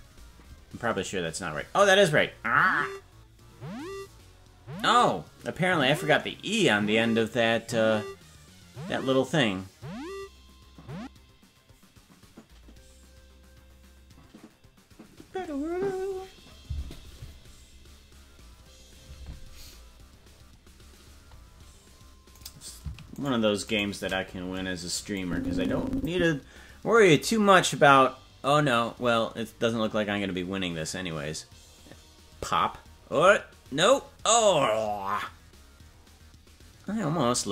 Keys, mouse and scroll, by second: 20.6-21.1 scroll down 1, 21.1-22.2 scroll up 1, 22.5 right click, 23.3 shift+right click, 25.2 click.